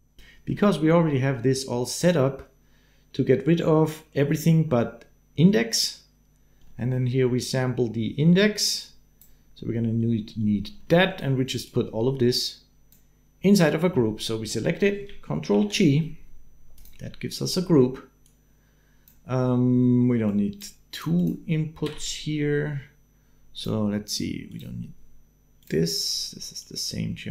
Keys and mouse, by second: 0.0 click, 1.2 click, 6.4 click, 8.9 click, 10.7 middle click, 11.4-12.7 middle drag, 14.3 middle click, 15.3 ctrl+g, 16.5 middle click, 17.5 middle click, 18.4 click, 20.1 click, 20.9 click, 21.6 n, 24.3 click, 25.4 click, 26.5-27.3 drag.